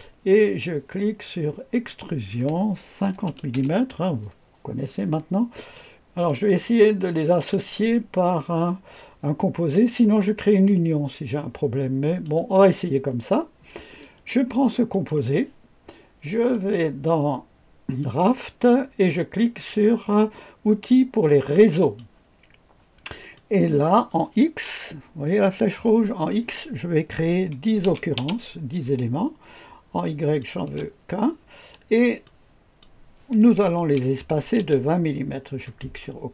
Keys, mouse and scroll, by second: 1.7 click, 3.0 KP_5, 3.2 KP_0, 3.4 Return, 5.5 click, 12.0 click, 14.9 click, 16.4 click, 17.9 click, 21.7 click, 23.3 click, 27.8 KP_1, 28.1 KP_0, 30.0 click, 30.5 click, 30.6 KP_1, 32.2 click, 32.9 click, 33.7 KP_2, 34.5 KP_0, 35.6 click.